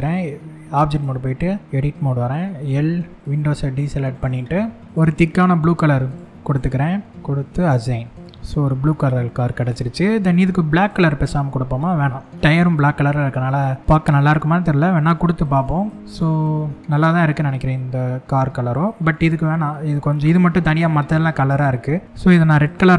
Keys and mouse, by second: 0.4 click, 1.2 Tab, 2.2 l, 3.7 shift+click, 4.2 middle click, 6.3 click, 7.2 click, 7.7 click, 8.1-9.2 middle drag, 11.6 middle click, 12.4 middle click, 15.4 shift+click, 15.9-18.7 middle drag, 22.4 click.